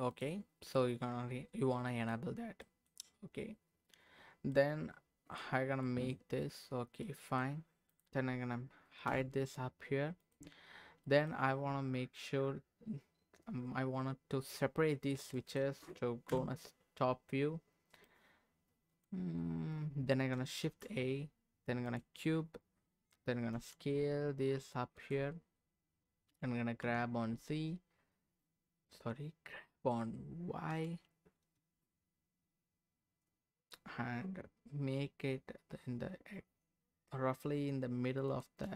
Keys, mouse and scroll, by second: 0.7-2.2 middle drag, 2.3 scroll up 1, 2.6 middle click, 4.5 middle click, 5.5-5.8 scroll down 1, 5.8 middle click, 6.8 scroll up 1, 7.0 middle click, 7.9 click, 9.1 h, 10.2 click, 11.0 middle click, 11.4-12.1 scroll down 1, 12.1-13.3 scroll down 1, 15.0-15.3 scroll down 2, 15.3 middle click, 16.3 KP_7, 17.0-18.0 scroll up 2, 18.0-19.1 drag, 18.0 scroll up 1, 19.3-19.8 scroll up 2, 20.6 shift+a, 22.5-23.5 scroll down 4, 23.5 s, 24.9 click, 25.4-25.8 scroll up 1, 26.3 g, 26.8 z, 28.4 g, 28.4 z, 30.7 y, 38.3 shift+click.